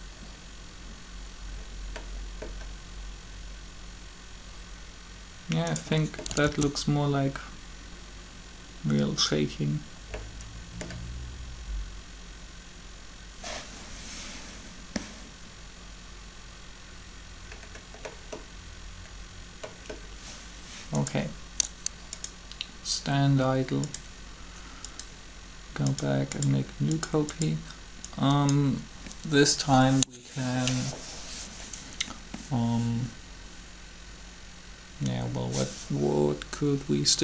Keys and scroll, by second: 6.2 alt+a.